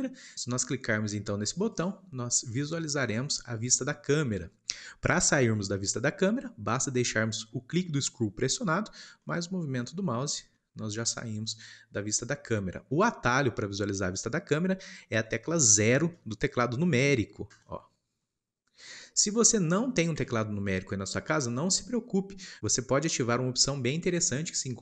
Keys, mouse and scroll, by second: 1.7 click, 9.2-10.0 middle drag, 10.0-10.5 scroll down 3, 10.5-17.5 middle drag, 17.5 KP_0, 19.3 scroll down 2, 19.6 middle click, 20.1 scroll down 2, 20.6-24.8 shift+middle drag.